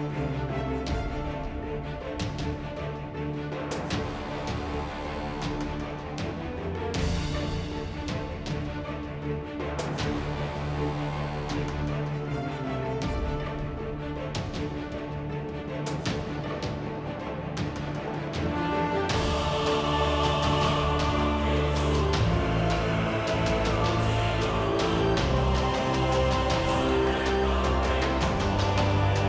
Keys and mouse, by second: 0.0-0.2 typing, 1.3-4.2 typing, 3.3 click, 8.0-12.7 typing, 8.9 ctrl+n, 9.0 ctrl+Tab, 15.0 ctrl+Tab, 15.9 j, 16.7 ctrl+r, 16.9 click, 17.6 click, 17.7 e, 19.5 g, 20.0 ctrl+Tab, 20.2-21.2 right drag, 21.2 f, 21.5 ctrl+r, 21.8 right click, 22.0-23.2 middle drag, 23.2 k, 23.9 Tab, 24.2 z, 24.3 Tab, 24.5 ctrl+r, 24.9 z, 25.0 KP_7, 25.3 Tab, 25.9-27.3 middle drag, 27.3 drag, 27.4 middle drag, 27.4 z, 27.6 a, 28.7 alt+1.